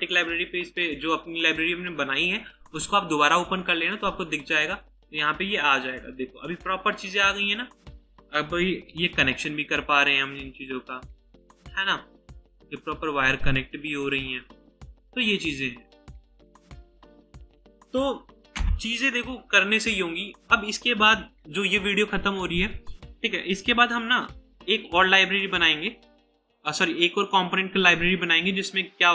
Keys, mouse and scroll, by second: 5.8 right click, 9.1 ctrl+w, 10.8 double click, 12.8 double click, 14.6 right click, 18.6 Delete, 25.4-26.3 scroll up 1.